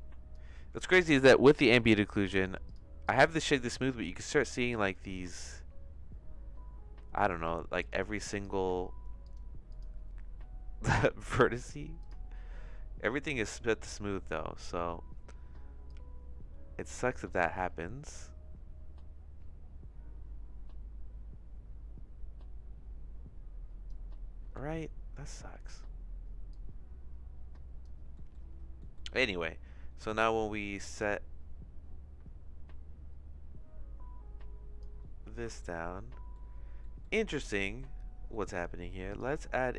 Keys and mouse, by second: 1.9 middle click, 2.3 right click, 3.0 click, 3.7-4.9 shift+middle drag, 7.8 click, 8.4 click, 9.2 click, 9.7 click, 15.8-23.9 drag, 24.7 shift+middle click, 26.5-27.8 drag, 28.2 middle click, 28.9 middle click, 30.1-34.8 shift+drag, 35.6 shift+middle click, 36.9 middle click, 37.7 middle click, 38.4 middle click, 39.0 click.